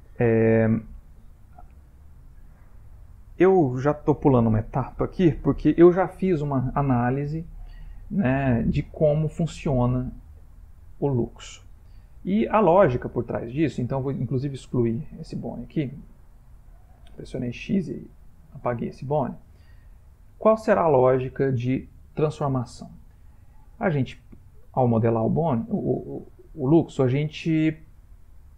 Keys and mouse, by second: 2.1-3.3 ctrl+middle click, 2.7 ctrl+middle click, 4.0-4.3 shift+middle click, 4.1 shift+middle click, 5.2 ctrl+middle click, 13.5 click, 15.0 x, 18.5 shift+middle click, 19.7 ctrl+middle click.